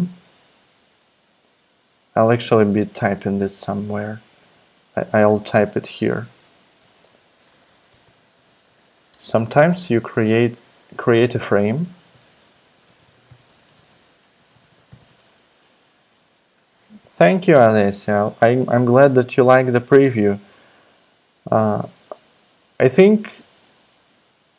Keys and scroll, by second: 2.3 super+Tab, 5.2 super+Up, 5.9 Return, 6.0 Return, 6.3 Up, 6.4 Up, 6.8-10.2 typing, 11.3-16.1 typing, 18.0 super+Tab.